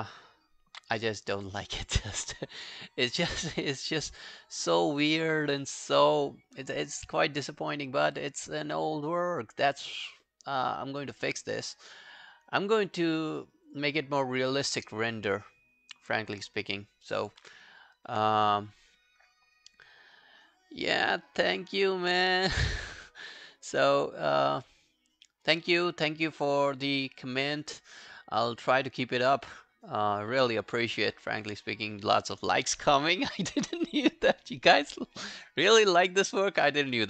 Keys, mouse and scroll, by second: 2.3-3.2 scroll up 1, 3.2 scroll down 1, 16.7-17.9 scroll down 3.